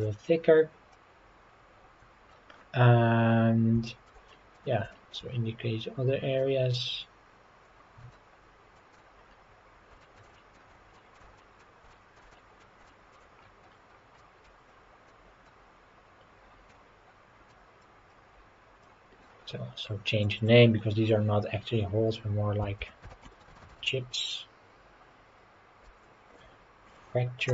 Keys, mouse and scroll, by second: 0.9-2.3 middle drag, 2.6 scroll down 2, 3.3-3.7 scroll down 2, 3.9 shift+middle click, 4.3 middle click, 4.9 shift+middle click, 5.2-5.7 scroll up 4, 6.4-9.0 drag, 9.2-9.6 scroll down 4, 10.0 shift+middle click, 10.3 middle click, 11.0 shift+middle click, 11.4 middle click, 11.9 shift+middle click, 12.3 middle click, 12.9 shift+middle click, 13.4-14.1 scroll up 6, 14.2 middle click, 15.1-16.8 drag, 17.5-19.3 drag, 20.2 click, 20.4-27.5 drag.